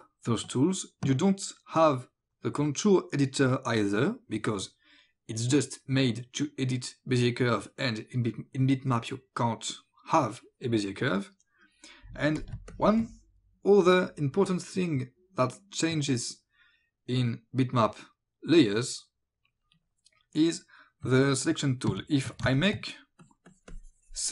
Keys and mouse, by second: 12.4 click, 12.6 space, 12.7 click, 21.9 alt+b, 22.5 space, 22.6 click, 23.2 click.